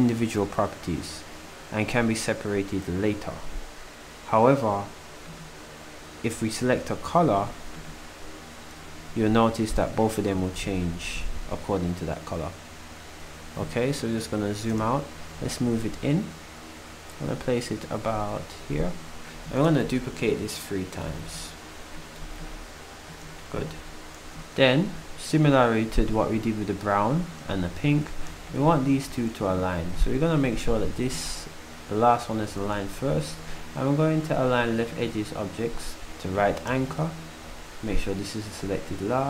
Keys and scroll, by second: 21.1 d.